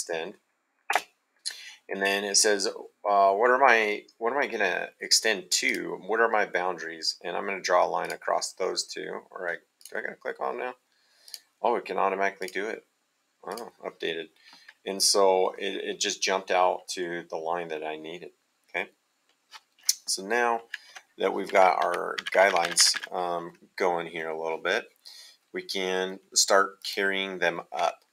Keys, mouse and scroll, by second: 0.9 space, 5.6 click, 8.0 click, 9.8 click, 11.2 click, 12.4 click, 13.4 click, 17.7 middle click.